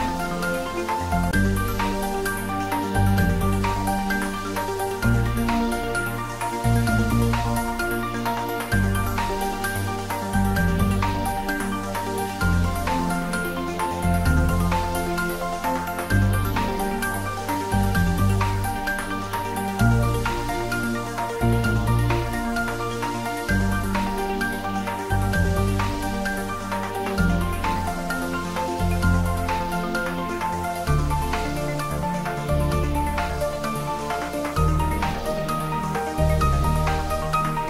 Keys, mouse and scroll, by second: 5.3 click, 5.7 s, 11.7 click, 12.6 s, 13.5 click, 14.0 scroll down 1, 14.4-15.3 middle drag, 15.7 s, 18.4 click, 19.3 s, 20.2 click, 20.7 scroll up 1, 22.0 click, 23.2 alt+shift+click, 24.3-24.9 middle click, 25.2 e, 26.2 click, 26.4-27.6 middle drag, 28.2 g, 28.6 x, 30.6 click, 32.0 shift+z, 33.5 click, 35.0-35.6 middle drag, 37.3 ctrl+b.